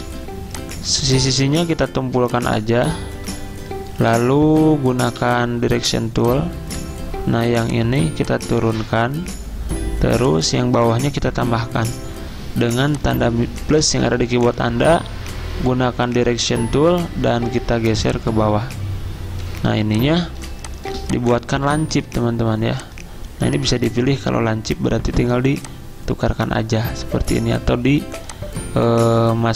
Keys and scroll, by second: 0.0 z, 1.5 a, 5.2 a, 11.3 =, 14.0 a, 19.7 z, 21.8 a.